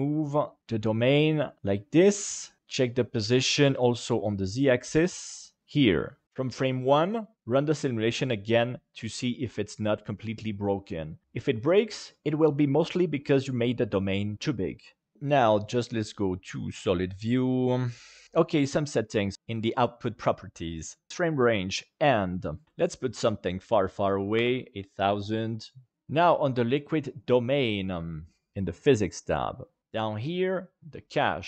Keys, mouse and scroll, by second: 1.9 click, 2.3-2.6 middle drag, 2.6 g, 3.3 z, 7.3 space, 17.1 click, 18.7 middle click, 22.3-24.3 drag, 27.1 click, 28.1 click, 28.5-29.8 middle drag.